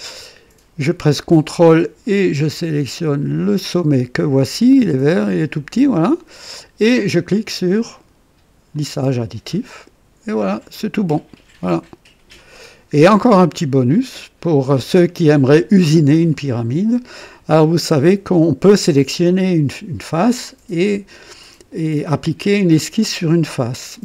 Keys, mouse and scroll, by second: 0.1-0.9 right drag, 3.4 ctrl+click, 8.7 click, 10.3 click, 11.3 click, 12.5 click, 13.9 click, 15.2 right click, 16.2-17.1 drag, 18.8 click.